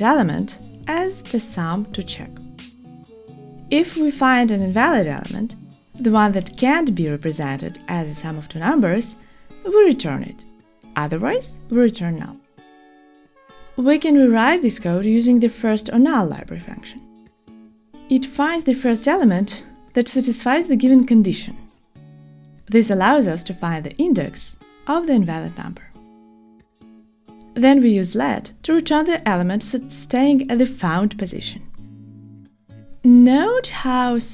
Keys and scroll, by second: 5.9 shift+super+Return, 6.1 shift+super+Return.